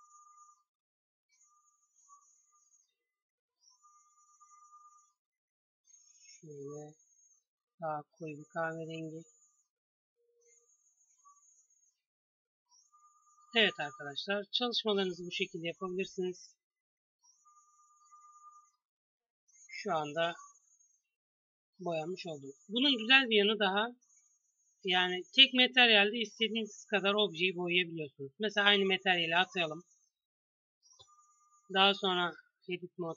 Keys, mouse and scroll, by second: 6.7 g, 8.5 Tab, 14.8-15.7 right drag, 15.7-18.1 drag, 19.9 KP_3, 25.4 shift+a, 28.6 click, 32.2 Tab.